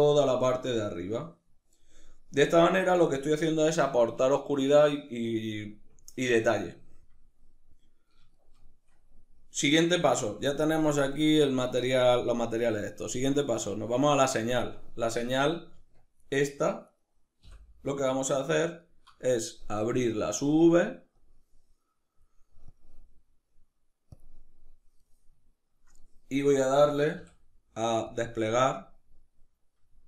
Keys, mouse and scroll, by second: 13.2 click, 15.4 Tab, 16.6 right click, 17.1 l, 17.8-20.8 shift+middle drag, 20.8-24.7 drag, 24.7-30.0 middle drag, 26.8 u.